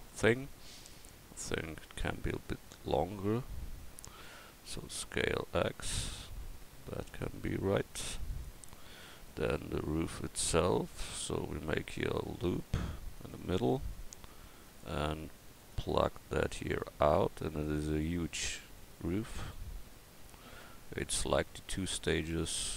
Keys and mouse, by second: 4.2 s, 8.9-10.0 middle drag, 10.1 Tab, 11.9 ctrl+r, 19.9 KP_1.